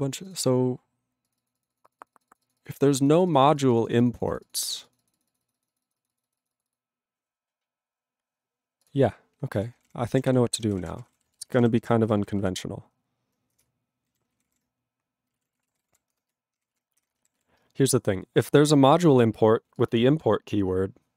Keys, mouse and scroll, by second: 0.2 click, 0.3 click, 0.4 double click, 0.4 double click, 1.2 click, 1.3 click, 1.4 double click, 1.5 double click, 1.6 click, 1.6 click, 1.8 click, 1.8 click, 1.8 click, 1.9 click, 2.0 click, 2.1 click, 2.1 click, 2.2 click, 2.3 click, 2.3 click, 2.4 click, 2.5 click, 2.6 click, 2.6 click, 2.7 click, 2.8 click, 3.0 click, 3.0 click, 3.1 click, 3.2 click, 3.3 click, 3.3 click, 3.4 click, 3.5 click, 3.6 click, 3.6 click, 3.7 click, 3.8 click, 3.8 click, 3.9 click, 4.0 click, 4.1 click, 4.1 click, 4.2 click, 4.3 click, 4.3 click, 4.4 click, 4.5 click, 4.6 click, 4.6 click, 4.7 click, 4.8 click, 4.8 click, 4.9 click, 5.0 click, 5.1 click, 5.1 click, 5.2 click, 5.3 click, 5.3 click, 5.4 click, 5.5 click, 5.5 click, 5.6 click, 5.7 click, 5.8 click, 5.8 click, 5.9 click, 6.0 click, 6.0 click, 6.1 click, 6.2 click, 6.2 click, 6.3 click, 6.4 click, 6.4 click, 6.5 click, 6.6 click, 6.7 click, 6.7 click, 8.8 click, 8.9 click, 9.6 ctrl+a, 9.7 ctrl+k, 10.3 ctrl+s, 10.5-12.5 typing, 12.6 ctrl+s, 13.6 Return, 14.1 ctrl+n, 14.3 ctrl+a, 14.4 ctrl+o, 14.4 Tab, 15.1-17.0 typing, 16.9 ctrl+e, 17.4 ctrl+s, 18.6 click, 18.7 click, 18.9 click, 18.9 click, 19.0 double click, 19.0 double click, 19.8 click.